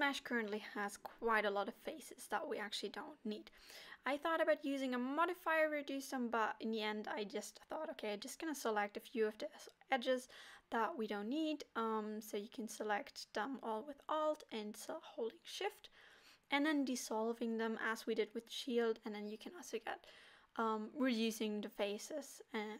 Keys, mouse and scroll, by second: 0.4 Tab, 1.5 click, 2.0 middle click, 2.0 scroll up 2, 2.1 middle click, 3.3 KP_7, 5.2 middle click, 7.4 alt+shift+click, 9.1 click, 9.9 alt+click, 10.8 alt+shift+click, 12.9 middle click, 13.0 middle click, 14.4 scroll down 2, 14.5 middle click, 14.8 KP_7, 15.7 middle click, 16.3 KP_1, 16.9 alt+shift+click, 20.7 x.